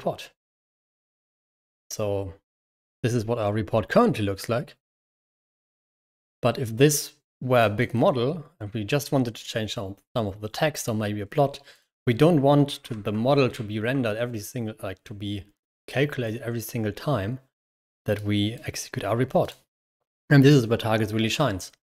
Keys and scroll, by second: 12.9 Escape, 13.3 shift+h, 13.6 Escape.